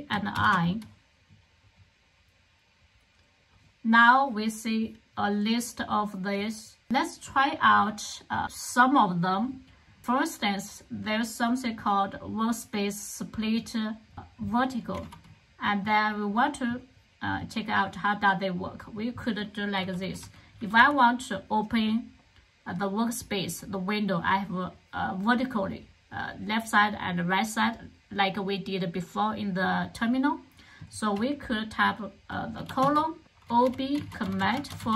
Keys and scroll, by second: 0.3 alt+super+i, 14.8 super+c, 19.7-20.7 typing, 32.6-34.9 typing.